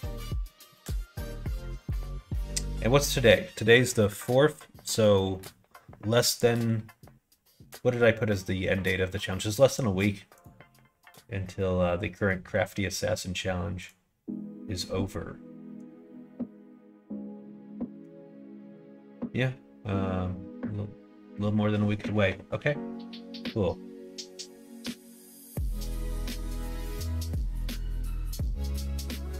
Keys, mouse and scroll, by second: 0.8 middle click, 1.8 click, 24.6 middle click, 25.6 middle click, 26.2 middle click, 26.7 middle click, 27.2 middle click, 27.7 middle click, 28.1 middle click, 29.0 middle click.